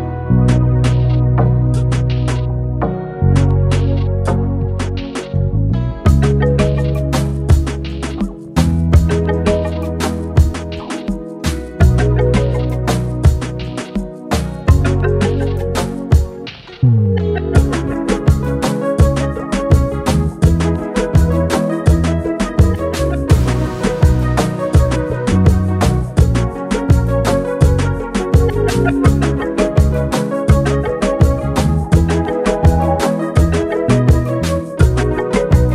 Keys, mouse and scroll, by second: 0.3 right click, 1.1 click, 2.3-3.4 alt+scroll down 1, 5.0 right click, 5.8 click, 8.9-10.8 drag, 11.8 ctrl+c, 12.5 ctrl+f, 14.0 alt+scroll down 1, 15.6-17.6 drag, 17.6-22.4 drag, 22.4 shift+Right, 25.0 shift+Right, 26.7 click, 28.7 Right, 30.5 shift+Right, 33.2 click, 34.6 alt+scroll up 1.